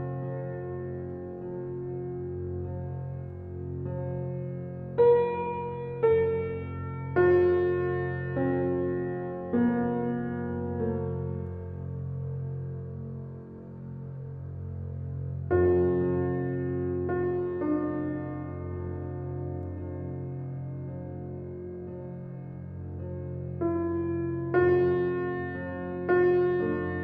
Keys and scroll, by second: 9.9 g, 12.8 ctrl+z.